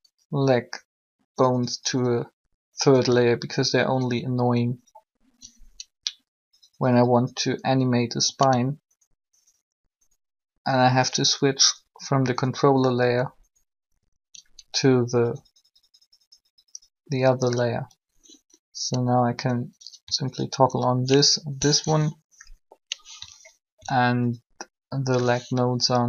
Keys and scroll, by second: 23.1 3.